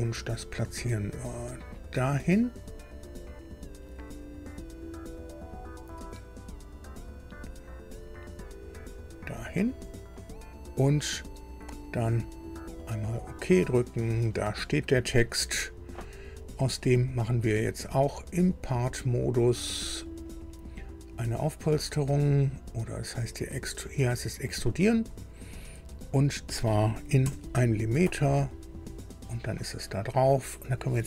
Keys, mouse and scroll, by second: 1.4 click, 4.7 click, 8.6 click, 13.1 click, 15.6 scroll down 2, 16.4 click, 18.4 click, 20.2 click, 24.8 click, 27.2 KP_1, 27.8 KP_Enter, 29.0 click.